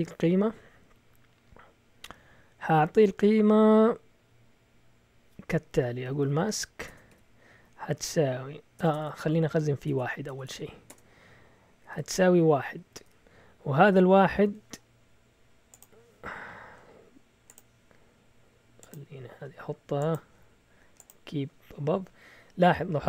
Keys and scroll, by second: 5.8-10.2 typing, 11.4-13.0 typing.